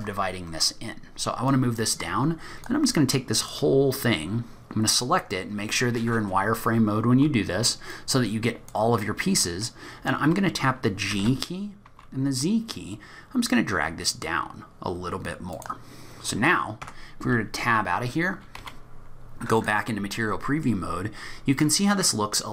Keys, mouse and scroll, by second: 2.6 click, 16.1-16.8 scroll down 1, 17.7 Tab, 17.7-19.3 scroll down 8, 18.5 z, 20.1 middle click, 20.9-21.4 scroll up 6.